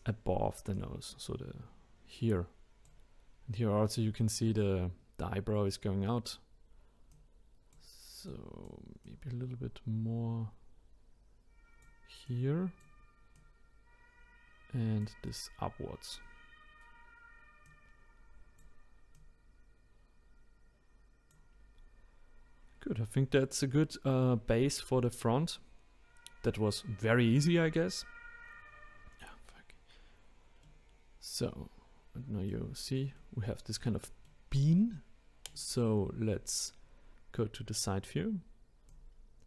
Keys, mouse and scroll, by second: 0.7-3.8 drag, 7.1 click, 8.3 click, 12.3 click, 13.3 click, 17.6 click, 19.1 click, 22.8-23.7 scroll down 1, 23.7-24.4 scroll up 2, 30.6-32.7 middle drag, 32.7-33.2 scroll down 2, 33.2-35.5 middle drag, 35.5 click, 36.2-36.7 scroll up 2, 38.9 click.